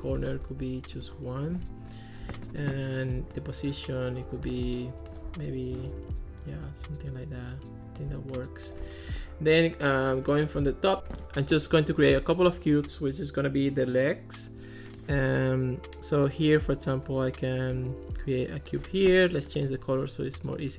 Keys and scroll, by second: 0.4 1, 1.0 Return.